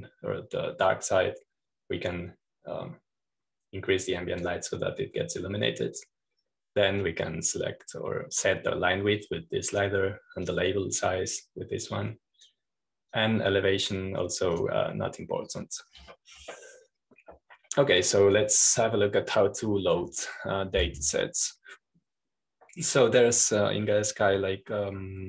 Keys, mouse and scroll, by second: 1.8-8.8 drag, 8.9-17.5 drag, 17.8-19.4 scroll down 1.